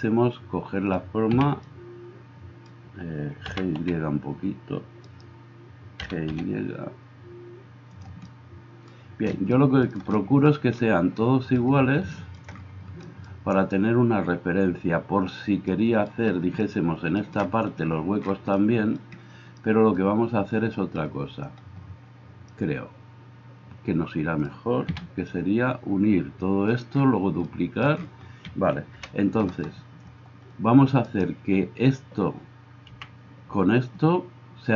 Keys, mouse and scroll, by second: 1.3 a, 3.5 g, 3.8 y, 5.2-31.1 middle drag, 6.0 g, 25.0 a, 28.9 KP_1, 31.1 right click, 32.0-34.7 middle drag, 33.0 n.